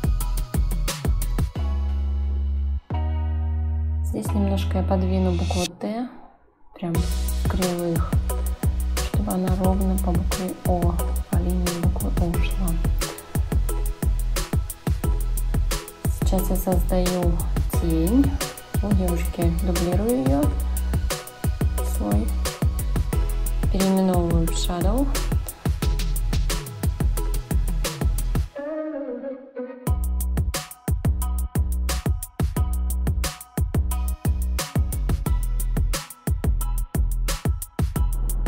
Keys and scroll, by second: 1.3 Return, 4.1 a, 9.2 Left, 18.4 s, 20.3 h, 22.0 o, 22.6 w, 23.3 Return, 31.0 ctrl+z, 38.1 ctrl+z.